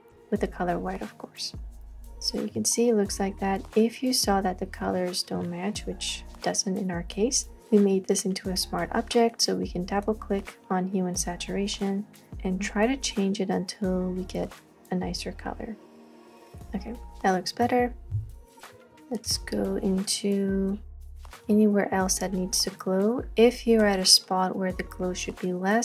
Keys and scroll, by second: 0.1 x, 4.9 space, 18.7 space.